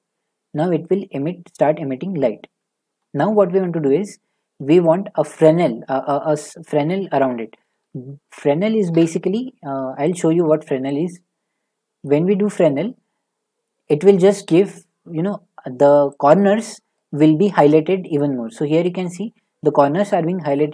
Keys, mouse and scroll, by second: 3.3 a, 4.9 click, 7.6-8.2 typing, 8.9 Return, 12.0 click, 13.1 click, 13.7 middle click, 16.5 middle click, 17.0-20.7 drag.